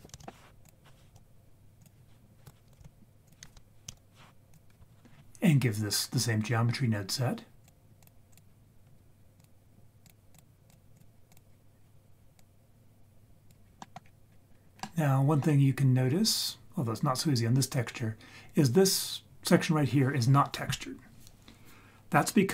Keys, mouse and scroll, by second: 0.1 shift+a, 1.1 s, 2.4 g, 3.9 ctrl+a, 7.6 click, 8.0-8.4 drag, 9.4-10.1 drag, 10.3 click, 10.9-11.3 drag, 12.4-13.5 drag, 13.6-14.0 scroll down 2, 13.8 middle drag, 14.0-14.6 scroll up 4, 14.6 scroll down 1, 14.8-15.4 middle drag, 14.8-15.2 scroll down 1, 15.9-16.9 scroll up 1, 16.9-17.6 scroll down 1.